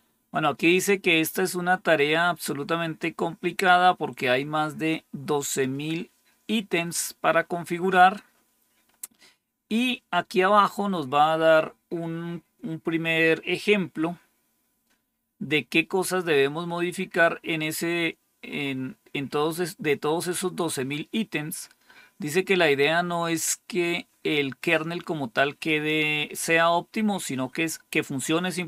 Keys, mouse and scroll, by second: 7.3-8.6 scroll down 1, 8.6-10.3 scroll down 1, 10.3-11.3 scroll down 1, 11.4-12.5 scroll down 1, 12.5-14.0 scroll down 1, 14.0-15.2 scroll down 1, 15.2-15.8 scroll down 1, 15.8-16.4 scroll down 1, 16.4-19.2 scroll down 1, 19.2-21.7 scroll down 1, 21.7-25.9 scroll down 1, 25.9-28.5 scroll down 1, 28.5-28.6 scroll down 1.